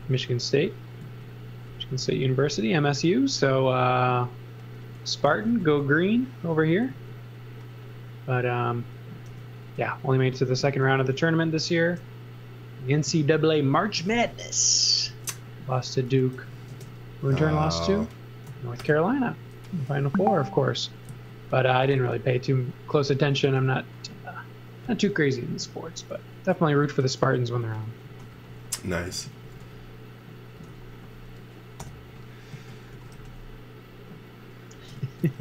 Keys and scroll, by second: 0.0-1.0 typing, 2.1 m, 5.0-6.9 typing, 9.3 m, 15.1 space, 16.4 super+x, 16.7 space, 18.8 alt+shift+v, 21.1 z, 21.7 x, 22.0 v, 23.4 x, 27.3-29.6 typing, 30.6 v, 31.8-33.6 typing, 34.8 space, 35.0 z.